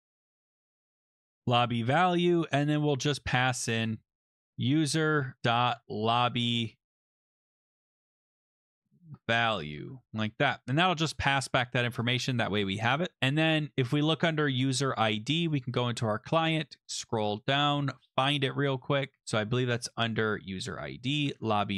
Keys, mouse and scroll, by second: 0.0-10.3 typing, 10.7 ctrl+s, 12.0 click, 12.1 click, 12.6 ctrl+c, 15.6 click, 16.3 scroll, 16.5-17.8 scroll down 14, 17.8 scroll up 3, 18.0 scroll, 19.2-20.1 scroll, 20.2 click, 20.7 Return, 21.3 ctrl+v.